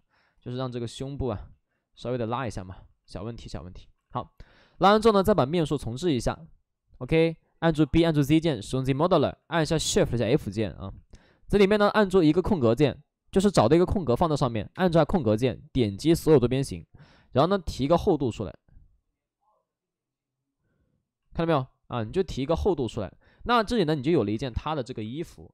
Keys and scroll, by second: 0.1 space, 0.9 alt+s, 0.9 space, 3.9 alt+s, 7.7 b, 7.9 z, 10.3 shift+f, 14.7 space, 15.2 space, 22.0 space, 22.0 shift+f, 22.8 alt+s, 22.8 shift+f, 24.1-24.9 typing.